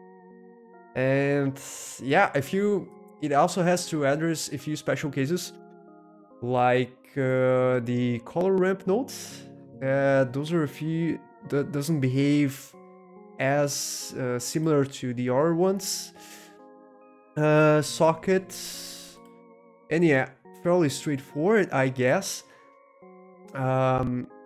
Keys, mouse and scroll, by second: 2.8 middle click, 2.9 click, 4.6 middle click, 4.6 scroll down 1, 6.2-7.5 drag, 8.1-9.3 middle drag, 8.7 scroll up 1, 12.1-13.1 middle drag, 14.4 middle click, 15.7-16.4 scroll up 2, 16.4-17.4 scroll up 1, 19.6-20.2 scroll up 2, 21.9 middle click, 22.4 scroll up 2.